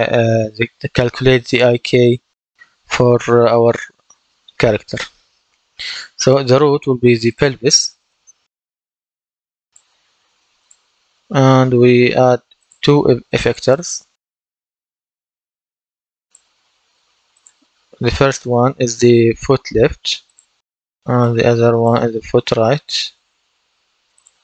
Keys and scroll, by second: 7.7-9.3 typing, 22.1-23.4 typing.